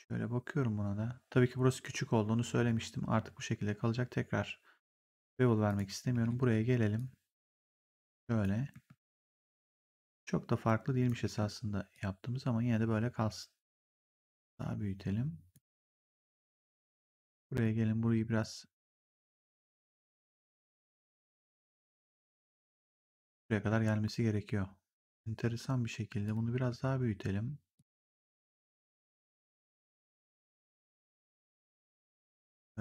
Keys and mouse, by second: 5.6 click, 6.0 w, 6.9 click, 8.6 r, 9.6 click, 11.1 w, 11.8 click, 13.8 r, 14.4 click, 16.8 click, 17.0 w, 17.5 click, 18.7 click, 20.0 click, 23.6 r, 26.1 click, 26.4 r, 27.6 click, 30.1 right click, 30.5 click, 31.1 w, 31.6 click.